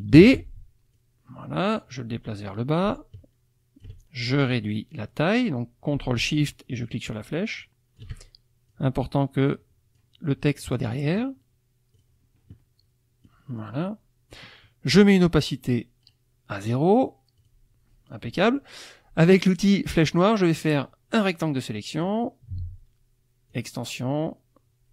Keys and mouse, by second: 0.1 ctrl+d, 0.9-4.0 drag, 5.4-8.2 drag, 8.7-10.2 drag, 11.9 click, 13.2-14.5 drag, 16.0 right click, 17.4 click, 19.3-20.2 drag, 20.6-22.2 drag, 23.5 click.